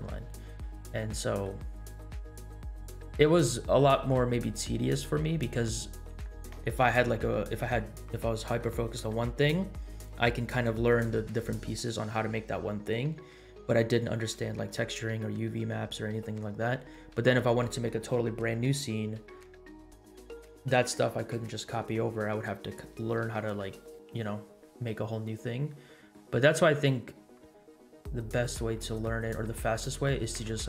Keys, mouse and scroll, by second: 0.1 middle click, 1.1 middle click, 1.7-2.5 scroll down 4, 2.5 middle click, 3.2 scroll up 1, 3.9 middle click, 4.4 click, 5.0 scroll up 2, 5.2 middle click, 25.2 scroll down 2, 25.7-26.1 middle drag, 28.3 scroll down 1, 28.7 middle click, 29.4 scroll down 1, 29.7 middle drag, 30.5-30.6 middle drag.